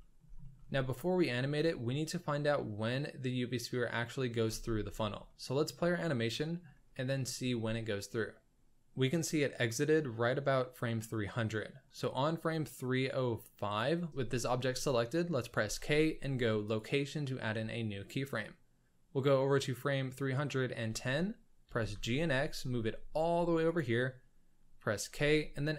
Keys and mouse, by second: 0.4 shift+middle drag, 4.4 space, 5.3-5.8 shift+middle drag, 6.4 shift+middle drag, 6.9 middle click, 7.4 shift+s, 12.0-13.8 middle drag, 14.1 k, 15.6 k, 18.4 click, 21.6 g, 25.0 k.